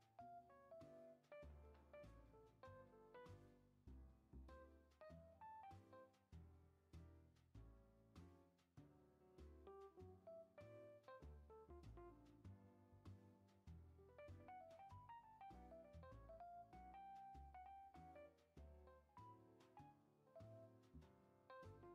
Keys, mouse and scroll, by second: 0.9-3.0 drag, 5.0 space, 5.5-6.9 drag, 7.4 click, 7.8 space, 9.8-10.9 drag, 10.9 space, 12.8 space, 13.1-13.8 middle drag, 13.8-14.8 drag, 18.0-18.4 drag, 19.1-21.3 drag, 21.6-21.9 drag.